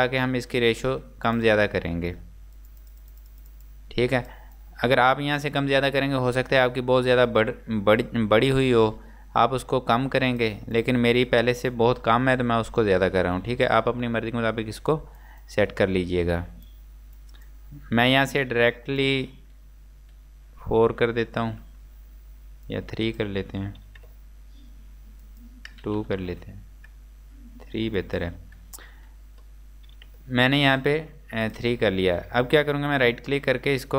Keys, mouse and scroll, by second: 31.1 Return, 31.5 click, 32.9 right click.